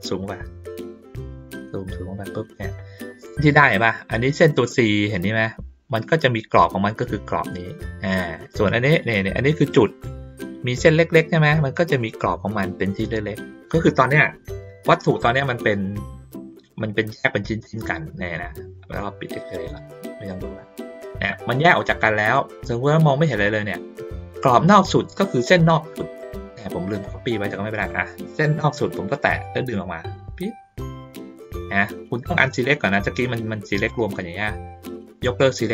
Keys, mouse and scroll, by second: 0.3 ctrl+middle click, 1.1 ctrl+middle click, 15.5 ctrl+middle click, 16.5 ctrl+middle click, 19.4 click, 20.4 click, 22.2 click, 25.7 ctrl+middle click, 26.2 ctrl+middle click, 27.0 ctrl+middle click, 28.5 click, 29.6-33.0 drag, 33.3 click, 35.1 click.